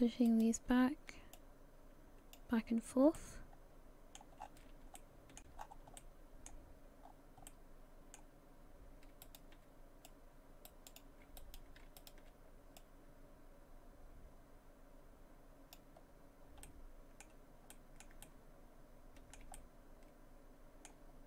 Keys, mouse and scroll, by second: 0.3 right click, 1.4 click, 3.2 middle click, 4.4-4.9 scroll up 5, 5.0 shift+middle click, 5.6-6.0 scroll up 2, 6.0 middle click, 7.0-7.5 scroll down 4, 7.5 middle click, 9.2 shift+right click, 10.1 click, 11.4 right click, 12.0 shift+right click, 12.8 click, 16.6 middle click, 17.7 middle click, 18.2 shift+middle click, 19.5 middle click.